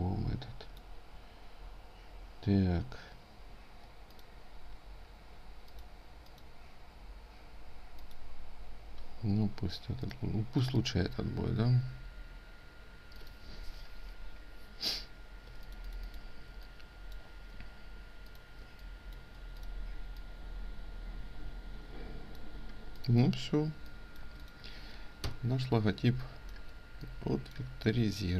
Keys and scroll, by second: 11.2 ctrl+z, 15.0 ctrl+space, 15.6 ctrl+alt+space.